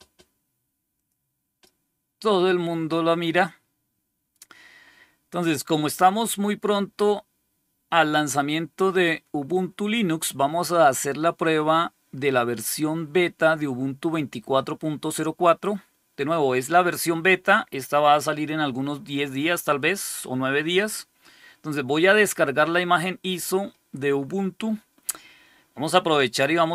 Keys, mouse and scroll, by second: 0.9 click, 6.3-9.4 scroll down 1, 9.4-19.4 scroll down 1, 19.4-26.7 scroll down 1.